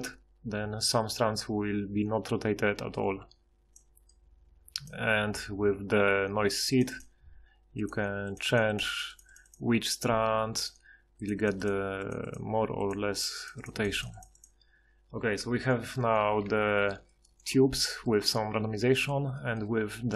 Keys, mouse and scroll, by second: 16.1 middle click, 16.4 Tab, 16.8 Tab, 17.5 a.